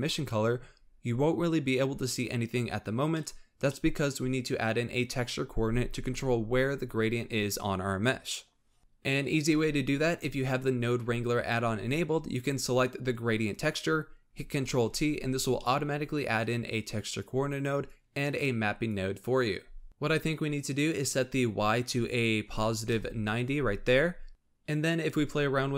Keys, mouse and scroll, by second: 3.1-6.7 middle drag, 8.8-9.1 scroll down 2, 12.3 click, 14.8 ctrl+t, 15.8-16.8 middle drag, 16.8 click, 17.2 click, 20.9-24.0 drag.